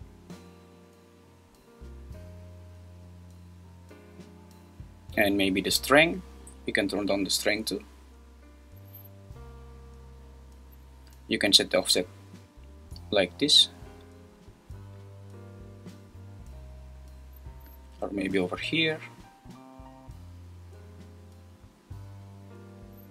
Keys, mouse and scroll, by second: 0.0-2.5 drag, 5.5-7.3 drag, 11.9-14.7 drag, 17.1-18.9 drag.